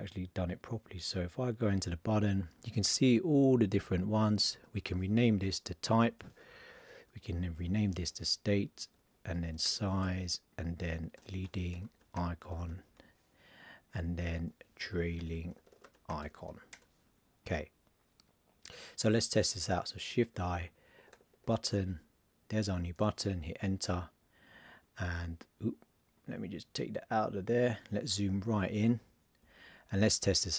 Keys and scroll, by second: 4.6 super+a, 5.4 shift+t, 7.2 super+a, 7.6 shift+s, 9.4 shift+s, 11.2 shift+l, 12.1 shift+i, 14.3 super+a, 14.8 shift+t, 16.1 shift+i, 20.2 shift+i.